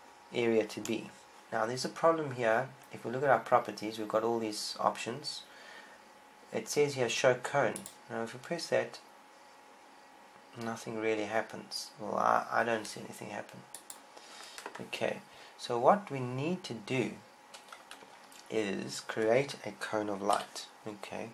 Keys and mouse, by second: 8.6-21.2 drag, 21.2 KP_1.